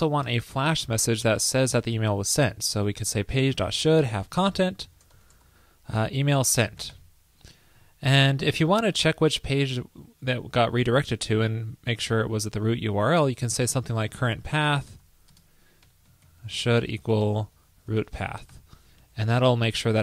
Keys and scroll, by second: 0.3 super+Return, 7.6 super+Right, 19.1 super+Right.